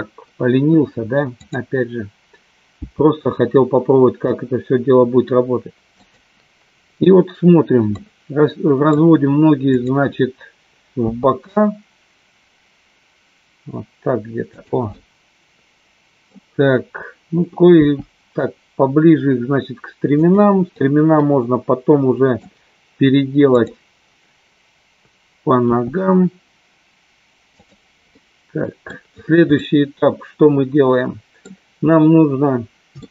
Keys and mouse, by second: 1.4 click, 3.1 g, 8.0 middle click, 11.3 g, 14.7 click, 14.9-16.4 middle drag, 17.7 g, 20.8-22.4 middle drag, 23.6 click, 25.9 g, 28.3 middle click, 29.5-31.5 middle drag, 33.0 shift+middle click.